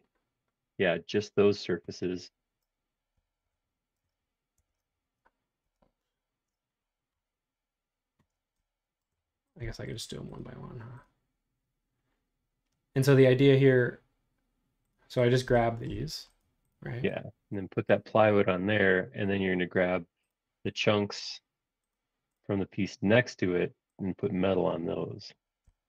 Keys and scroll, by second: 3.4 shift+3, 4.6 super+3, 5.6 super+4.